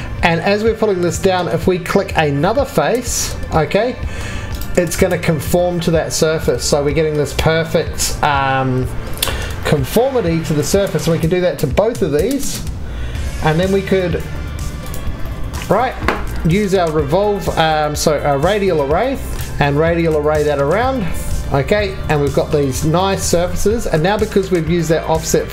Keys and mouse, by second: 2.6-3.2 middle drag, 3.3-4.5 middle drag, 4.5 middle click, 4.6-5.9 drag, 5.9 middle drag, 11.5-12.0 drag, 12.0 3, 12.3 click, 12.8-13.5 drag, 13.5-14.8 drag, 15.0 drag, 15.7-16.6 drag, 23.2-25.5 drag.